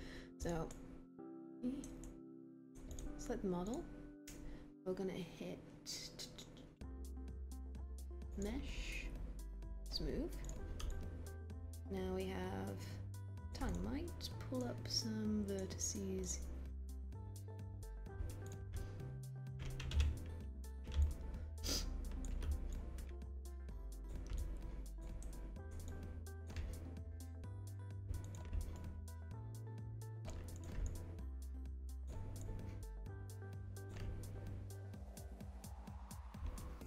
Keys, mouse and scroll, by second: 19.8 b.